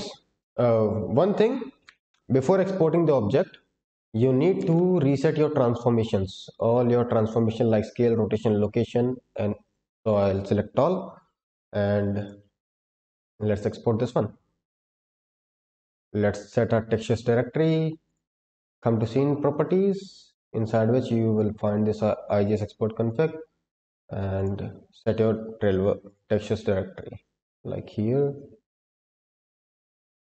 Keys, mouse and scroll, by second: 4.5 ctrl+a, 11.8 scroll up 2, 12.1 click, 12.6-13.1 scroll up 2, 13.1 click, 13.5-14.3 scroll down 4, 15.0 drag, 20.5-22.8 scroll up 2, 22.8-23.7 scroll down 2, 24.3 drag.